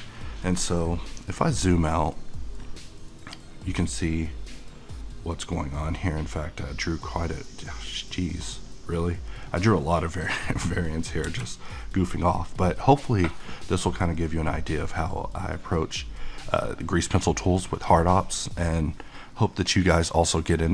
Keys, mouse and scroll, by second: 1.9 -, 3.0 middle click, 4.4 middle click, 5.4 middle click, 6.0 -, 6.2 middle click, 7.4 -, 7.8-11.3 middle drag, 11.3 t, 11.9-20.7 middle drag.